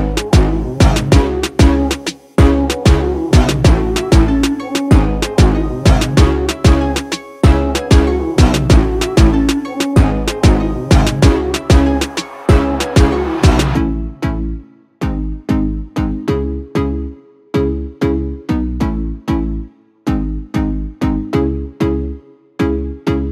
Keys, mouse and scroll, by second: 1.2-3.9 drag, 3.9-8.8 drag, 8.8-13.8 drag, 15.2 space, 15.3-23.3 drag.